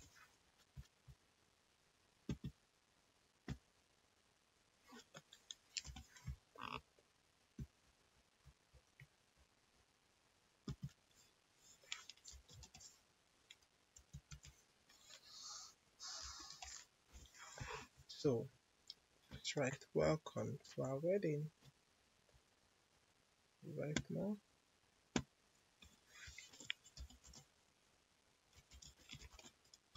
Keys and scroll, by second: 5.8 l, 12.0-13.9 typing, 16.1 5, 16.5 0, 17.0 Return, 26.4-29.9 typing.